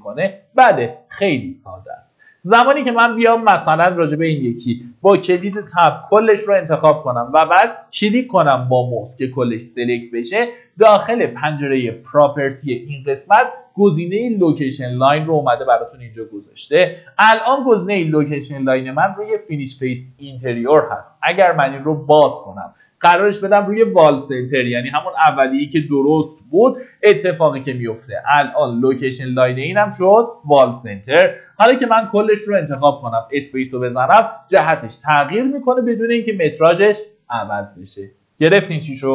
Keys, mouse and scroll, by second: 0.3 middle click, 0.7-1.0 scroll down 1, 2.6 middle click, 3.8-4.9 scroll up 1, 5.8 Tab, 7.1 click, 28.4 scroll up 1, 28.8 click, 31.4 Tab, 31.8 click.